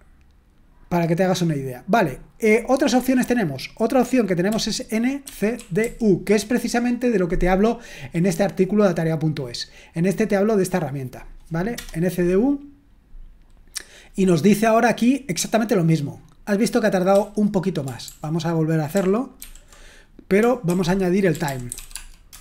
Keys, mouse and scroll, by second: 4.4-6.3 typing, 7.6-8.8 scroll up 1, 8.8-9.4 scroll down 1, 9.4-11.2 scroll down 1, 11.2-12.9 drag, 11.7 Return, 15.4-16.2 scroll down 1, 16.2-17.1 scroll down 1, 17.1 q, 19.4 ctrl+p, 20.6 ctrl+a, 21.0-22.4 typing.